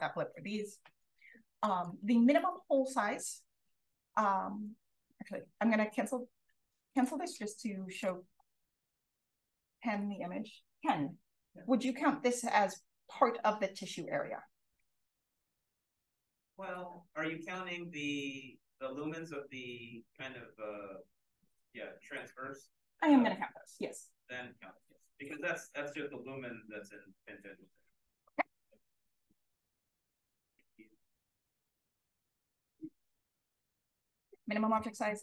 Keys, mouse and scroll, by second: 1.6 click, 6.9 click, 7.9 click, 8.3 c, 8.5-10.4 scroll up 1, 9.9 click, 28.8-30.9 drag, 32.6 click, 33.8 click, 34.2-35.2 typing.